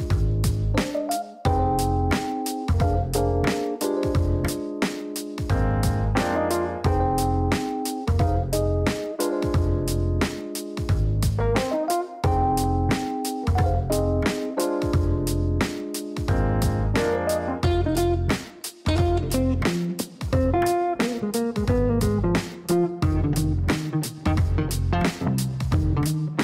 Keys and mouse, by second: 4.8 click, 5.9 KP_3, 6.0 KP_0, 6.2 KP_Enter, 10.3 click, 11.4 KP_1, 11.5 KP_5, 11.9 KP_Enter, 17.2 click, 19.1 KP_1, 19.2 KP_5, 19.5 KP_Enter, 25.2 click, 26.3 KP_3.